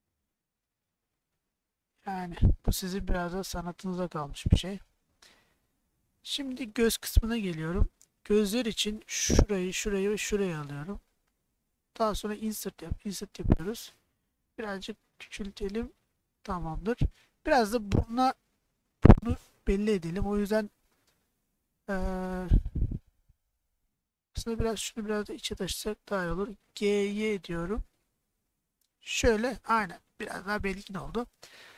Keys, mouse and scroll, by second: 0.0 g, 0.5 z, 2.5 click, 3.1-6.5 middle drag, 8.2 shift+middle click, 9.2 click, 13.4 i, 16.2 click, 16.9 click, 18.2 middle click, 19.2 click, 19.7 click, 24.6 shift+click, 25.0 shift+click, 25.9 middle click, 26.8 g, 27.2 y, 29.4 click, 29.8-31.1 middle drag.